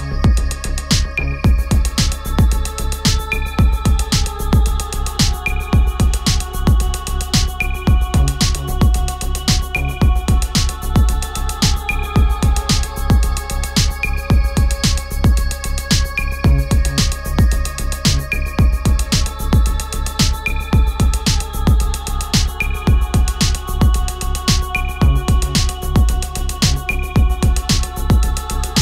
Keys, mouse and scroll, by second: 0.9 Return, 4.7 click, 5.9-8.7 alt+drag, 8.7 ctrl+t, 10.1-17.4 alt+drag, 18.5-20.8 drag, 22.9 ctrl+t, 23.6-28.8 drag.